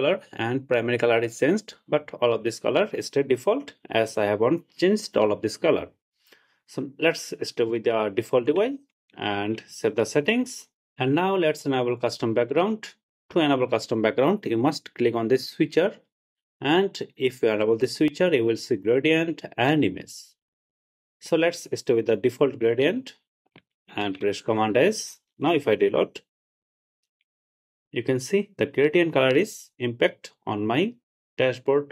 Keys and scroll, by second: 24.3 super+s, 25.7 super+r.